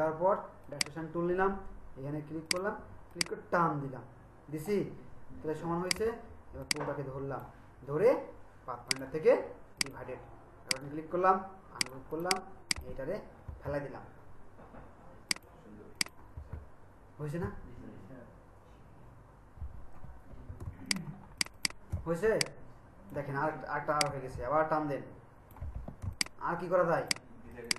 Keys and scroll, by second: 13.5 BackSpace, 16.4 BackSpace, 20.6 ctrl+alt+space, 26.0 ctrl+alt+shift+space.